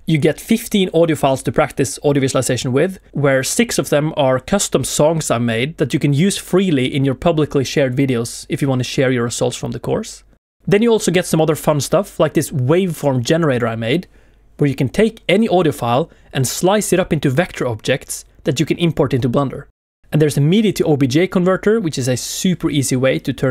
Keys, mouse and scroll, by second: 23.1 shift+middle click, 23.1 scroll down 1, 23.3 shift+middle click.